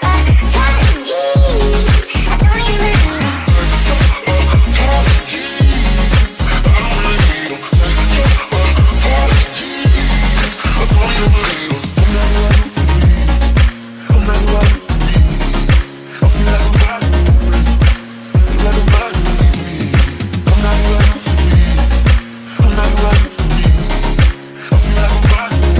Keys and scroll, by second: 12.6 e, 14.3 q, 14.7 e, 16.0-18.4 typing, 20.5 q, 21.2 s.